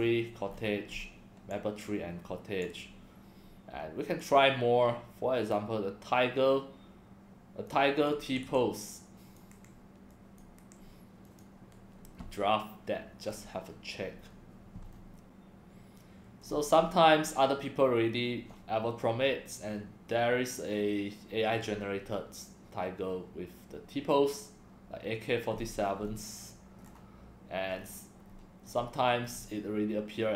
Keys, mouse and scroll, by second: 0.5-1.0 scroll up 7, 1.5-2.6 drag, 4.2 click, 5.4 click, 7.7 click, 8.2 BackSpace, 8.4 BackSpace, 8.9 click, 9.5 ctrl+c, 10.1 click, 10.6 ctrl+v, 11.2 click, 13.2 scroll down 5, 14.2 scroll up 1, 14.9 scroll up 3, 15.0 scroll down 1, 16.4 scroll down 1, 25.5-26.1 scroll up 8, 26.8 scroll down 2, 26.9 scroll up 5, 27.7-28.7 scroll down 7, 29.2 click.